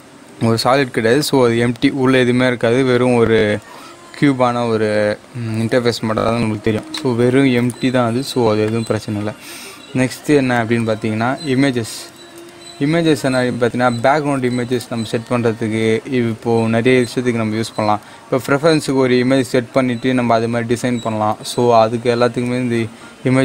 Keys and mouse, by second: 6.8 click, 6.9-10.3 drag, 10.3 shift+a.